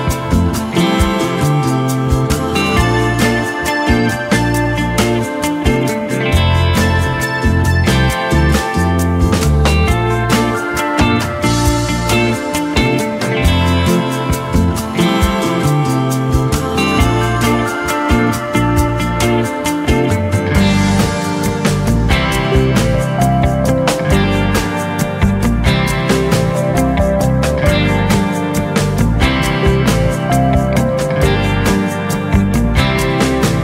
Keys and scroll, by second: 0.2-0.9 typing, 3.1 ctrl+j, 8.2 j, 11.8-12.5 typing, 14.4 ctrl+j, 25.5 Return, 25.9-26.7 typing, 30.4 ctrl+j.